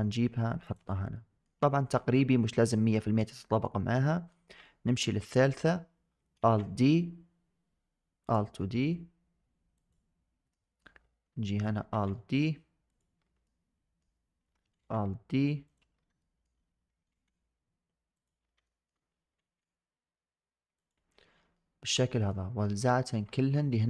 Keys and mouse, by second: 1.0 shift+drag, 3.3 shift+drag, 4.1 shift+middle click, 4.5 shift+middle click, 6.2 alt+d, 9.6 click, 10.4 shift+drag, 11.8 alt+d, 13.3-13.9 shift+drag, 14.6 alt+d, 16.1 shift+click, 16.9 alt+d, 18.5 shift+click, 19.3 alt+d, 21.4 shift+drag, 22.0 shift+drag.